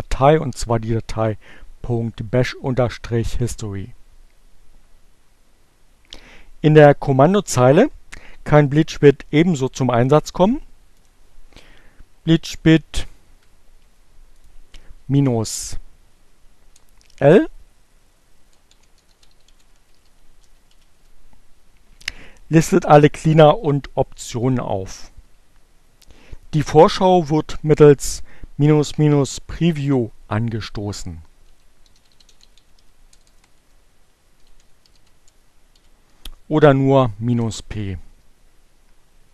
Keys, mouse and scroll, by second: 5.4 click, 8.3 click, 10.5 Up, 10.6 Up, 10.9 click, 11.1 Up, 16.0 BackSpace, 18.0-20.5 typing, 21.0 Return, 30.7-32.2 typing, 33.5-36.5 typing, 38.6-39.3 typing.